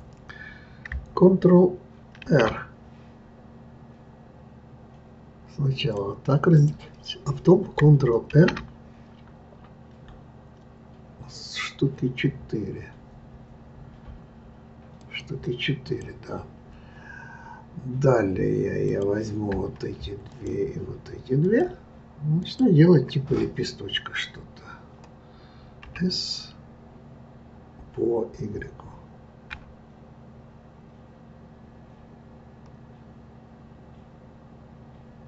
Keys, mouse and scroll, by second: 2.2 ctrl+r, 8.3 ctrl+r, 18.8 click, 20.3 shift+click, 21.4 shift+click, 22.4 shift+click, 25.8 s.